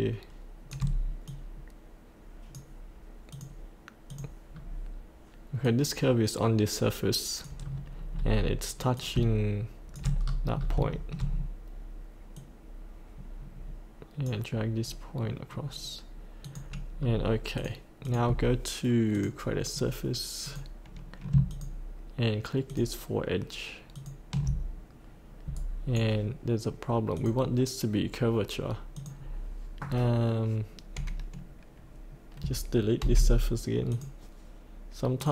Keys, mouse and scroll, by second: 1.3 click, 4.6-5.6 scroll down 1, 5.7-7.6 drag, 7.6-8.1 scroll down 1, 8.9 click, 10.2-10.6 scroll up 1, 10.9 shift+middle click, 11.3-12.3 scroll down 1, 12.3-14.7 drag, 16.4 click, 16.9 scroll up 1, 17.5 click, 20.4 click, 21.5 ctrl+click, 22.7 ctrl+click, 23.9 ctrl+click, 25.5 right click, 27.1 click, 29.8-30.2 scroll down 1, 33.0 Delete, 33.8 click.